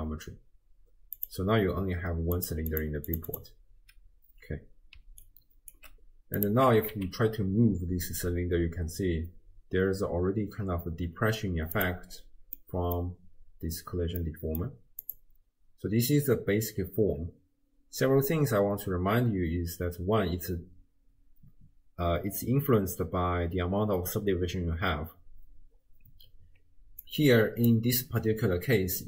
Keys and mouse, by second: 1.2 click, 2.4 click, 2.7 click, 3.1 click, 3.3 click, 5.0 d, 5.3 right click, 5.8 d, 6.4 click, 6.4 d, 6.7 g, 12.6 middle click, 14.2 middle click, 15.1 click, 27.1 click.